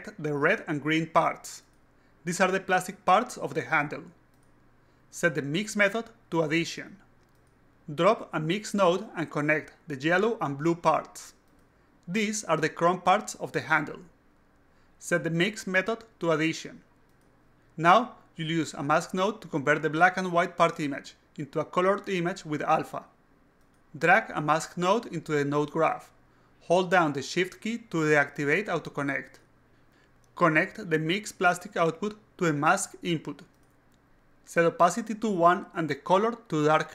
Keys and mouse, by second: 0.4 click, 1.1 click, 1.5 click, 2.0-3.5 typing, 6.5 click, 7.1 click, 7.8 click, 8.2-9.9 drag, 10.6 click, 11.6 click, 12.4 click, 13.6 click, 14.3-15.9 typing, 16.6 click, 17.3 click, 24.5 click, 25.5-27.2 drag, 32.4-33.4 drag, 33.7-35.2 drag, 36.7-36.9 drag.